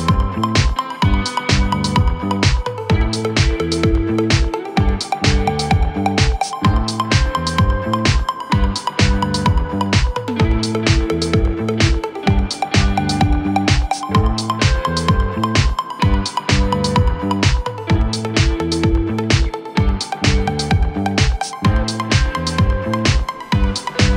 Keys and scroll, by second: 0.2 shift+F2, 0.5 Escape, 5.9 shift+Page_Down, 16.6 F3, 17.6 Escape, 18.5 shift+F2, 18.8 Escape, 22.7 ctrl+z.